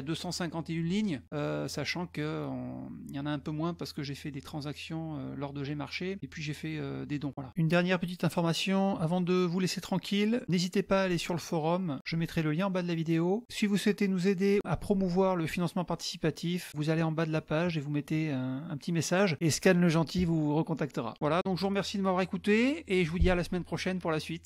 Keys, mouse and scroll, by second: 1.2 middle click, 1.2-4.2 scroll up 11, 1.6 middle click, 5.6-7.4 scroll up 12, 13.0 click, 16.5-17.4 scroll down 5, 17.5 scroll up 1.